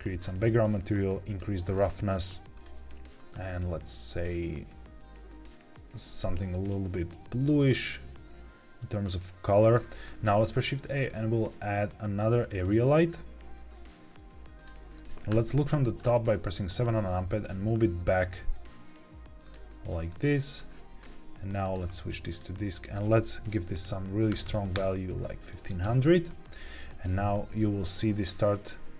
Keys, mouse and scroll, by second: 0.1-1.0 scroll down 2, 1.0 click, 1.6-1.9 scroll up 3, 2.5 click, 10.2 shift+a, 15.0 Escape, 15.0 g, 15.0 z, 15.2 KP_7, 15.9 scroll down 3, 16.6 g, 19.4 click, 20.0 click, 21.5 click, 22.7-24.7 drag, 24.4 KP_0, 25.7 KP_0, 27.0 g, 27.1 z.